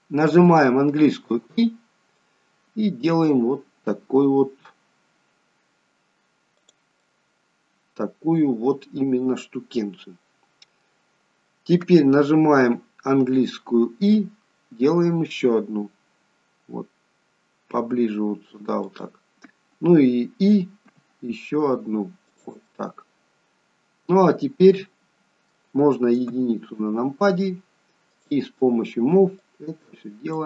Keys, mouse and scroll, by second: 6.9 middle click, 10.9-12.9 scroll down 1, 22.6 middle click, 26.2 KP_1, 28.1 click.